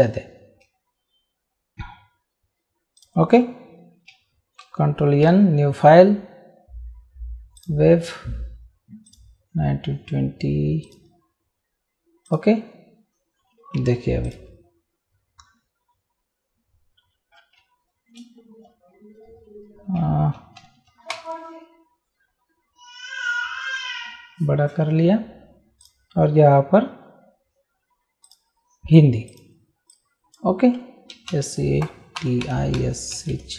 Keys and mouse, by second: 3.0 click, 4.6 ctrl+n, 7.6 click, 9.1 click, 10.8 click, 12.3 click, 13.8 t, 14.2 click, 17.9 shift+s, 20.6 ctrl+a, 21.1 ctrl+shift+>, 25.8 click, 28.2 click, 30.9-33.5 typing.